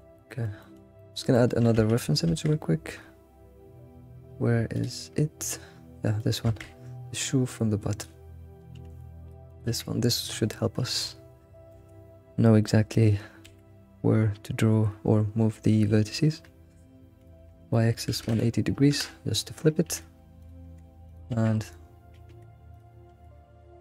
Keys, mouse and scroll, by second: 1.0 alt+middle click, 1.3 alt+middle click, 1.9 Tab, 8.9 s, 9.7 g, 10.4-10.8 scroll up 3, 11.7 s, 19.9 s, 20.6 g, 21.3 alt+x, 21.5-22.2 scroll up 7, 22.7 g, 23.5 s.